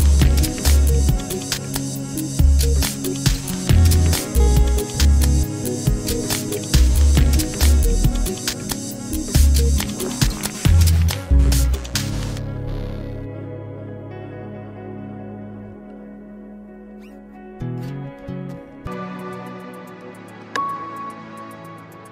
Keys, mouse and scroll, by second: 0.1 alt+shift+click, 0.2 middle click, 0.8-1.2 ctrl+z, 1.4 middle click, 1.5 alt+shift+click, 1.8-5.9 typing, 2.0 middle click, 2.1 alt+shift+click, 6.5 Tab, 6.6 middle click, 6.8 Tab, 7.0 a, 7.0 middle click, 7.1 scroll up 1, 7.2 alt+shift+click, 7.3 a, 7.6 middle click, 8.0 click, 8.3 alt+shift+click, 9.6 click, 10.5 shift+click, 12.1 ctrl+shift+KP_Add, 12.6 ctrl+shift+KP_Add, 13.0 ctrl+shift+KP_Add, 13.2 ctrl+shift+KP_Add, 13.4 ctrl+shift+KP_Add, 13.7 ctrl+shift+KP_Add, 14.0 ctrl+shift+KP_Add, 14.2 ctrl+shift+KP_Add, 14.5 ctrl+shift+KP_Add, 14.9 ctrl+shift+KP_Add, 18.3-19.7 drag.